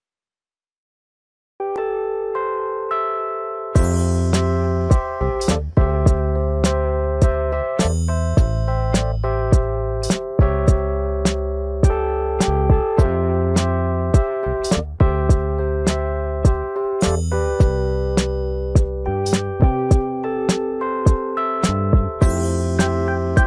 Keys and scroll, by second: 6.5 typing, 8.3-9.1 typing, 11.6 ctrl+z, 21.7-22.6 typing.